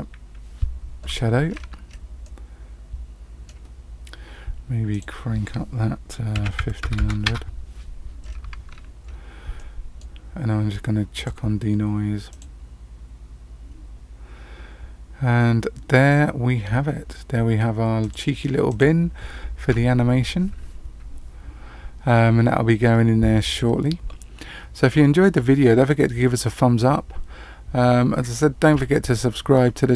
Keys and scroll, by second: 6.9 KP_0.